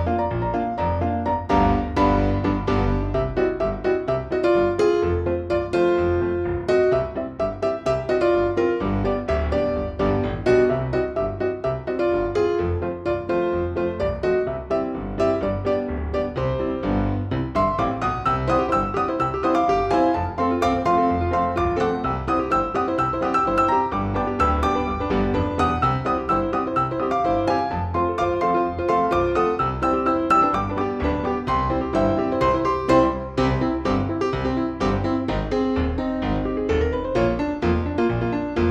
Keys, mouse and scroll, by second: 0.7 shift+click, 1.4 shift+click, 2.0 shift+F2, 2.5 ctrl+alt+shift+click, 2.9-4.1 ctrl+alt+shift+drag, 4.6 F6, 5.6 shift+click, 6.7 shift+click, 7.6 shift+click, 8.8 shift+click, 9.8 shift+click, 11.1 shift+click, 12.2 shift+click, 13.6 shift+click, 14.7-15.9 shift+drag, 16.4 shift+click, 17.3 ctrl+shift+z, 17.8 ctrl+shift+click, 18.3 shift+click, 20.4 shift+click, 21.4 shift+click, 22.1 shift+click, 23.2 shift+click, 23.8 shift+click, 25.0 shift+click, 26.5-27.6 shift+drag, 28.1 shift+click, 28.9 F1, 29.5-30.9 drag, 33.0 click, 34.2-35.8 drag, 38.0 click.